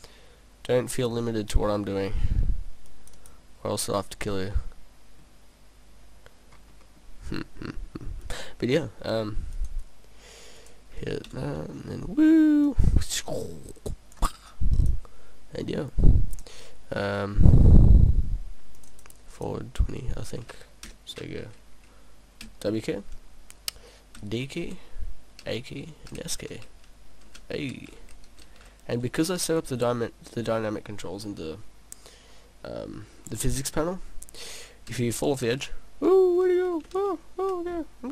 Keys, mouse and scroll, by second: 0.8 scroll up 1, 0.9 middle click, 2.0-2.3 scroll up 2, 3.0 click, 3.2 click, 4.4 scroll down 1, 4.6 middle click, 5.6-6.0 scroll down 2, 6.4 scroll down 1, 6.9 middle click, 8.3 click, 9.6 click, 10.6 click, 12.7 click, 14.8 click, 19.0 click, 20.9 click.